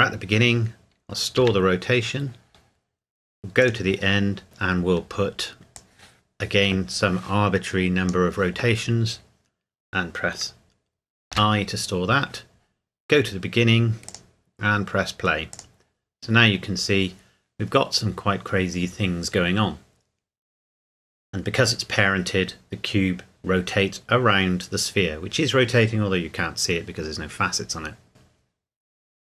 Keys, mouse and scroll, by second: 3.6 click, 5.7 click, 14.1 click.